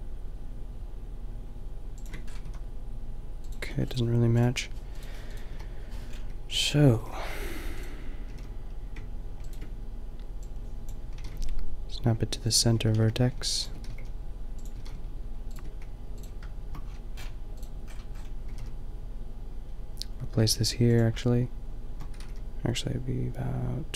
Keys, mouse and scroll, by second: 2.2-4.2 middle drag, 2.4 a, 4.2 Delete, 4.2-5.6 drag, 5.6 Delete, 6.0-6.3 middle drag, 6.5 x, 6.9 g, 8.3 g, 11.1 g, 12.8 g, 13.9 g, 14.7 g, 16.9 click, 18.4 g, 19.2-20.8 drag, 21.2-23.9 drag, 22.1 g.